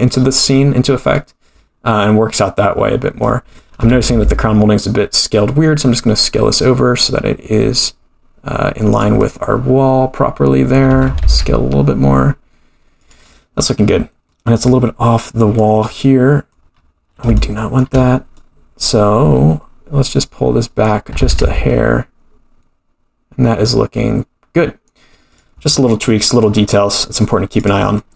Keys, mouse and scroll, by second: 1.1-2.4 middle drag, 3.2 middle click, 3.8 s, 9.2-10.9 middle drag, 10.9 s, 14.3-15.6 middle drag, 15.8 middle click, 16.8-17.2 scroll up 6, 17.4 shift+middle click, 18.4-21.2 middle drag, 21.2 g, 25.6-27.6 scroll down 6, 26.1-26.4 middle drag, 27.6 click, 27.6 scroll down 1, 28.0-28.1 middle drag.